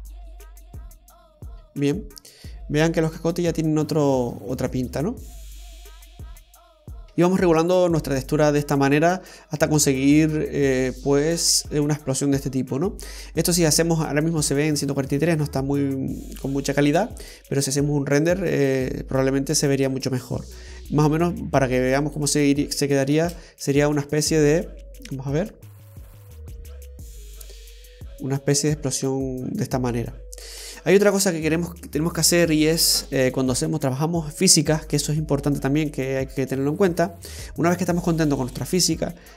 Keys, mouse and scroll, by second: 0.5 space, 2.1 scroll up 1, 2.8-3.4 scroll up 3, 7.0 click, 7.4-8.0 scroll down 2, 8.0 middle click, 22.1 click, 23.2 space, 30.7 space, 38.4 right click.